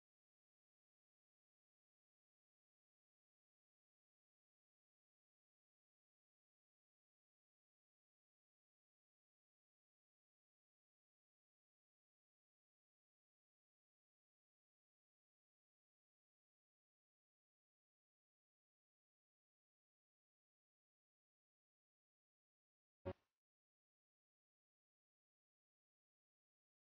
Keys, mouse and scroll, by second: 0.8 ctrl+d, 1.8-3.2 drag, 9.4-10.8 scroll up 1, 10.8 click, 13.4 click, 15.9 Return, 17.1 click, 18.1 Return, 19.6-25.1 drag, 25.1-26.7 scroll down 1, 26.7 click.